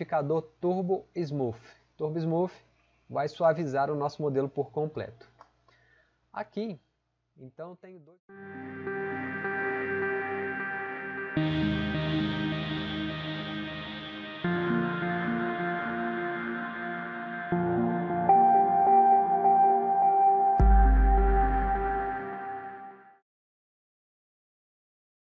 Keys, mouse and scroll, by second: 2.2 typing.